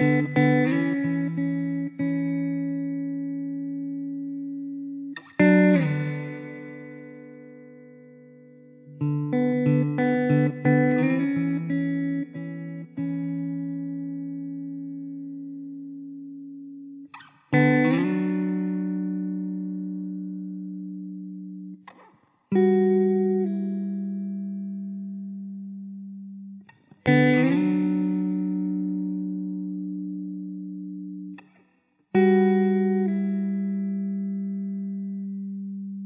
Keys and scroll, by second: 0.0 s, 2.2 ctrl+r, 7.7 ctrl+z, 9.4 ctrl+z, 10.6 alt+z, 11.5 `, 13.8 alt+z, 16.6 alt+z, 17.8 alt+z, 22.0 s, 22.7 `, 23.1 alt+z, 24.2 ctrl+r, 25.5 s, 26.4 ctrl+r, 26.9 s, 28.1 2, 29.8 s, 30.4 s, 31.6 s, 32.7 `, 34.2 Tab, 35.0 Tab.